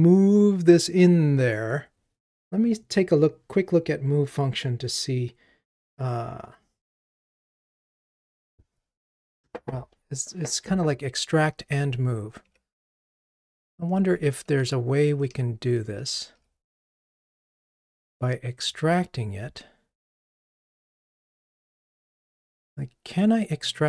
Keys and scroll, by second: 11.8 super+z, 12.6 super+z, 13.3 super+z, 14.1 super+z, 16.3 ctrl+r.